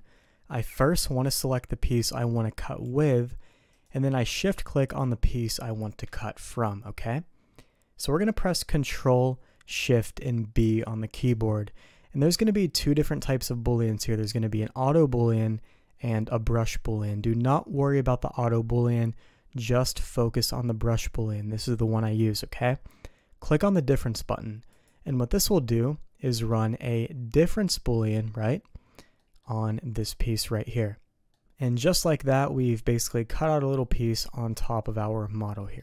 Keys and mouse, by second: 2.8 g, 4.8 shift+click, 10.6 ctrl+shift+b, 25.5-26.5 middle drag, 29.1 middle drag, 31.3-33.0 middle drag, 33.7 middle drag, 34.5 middle click, 35.5 middle click.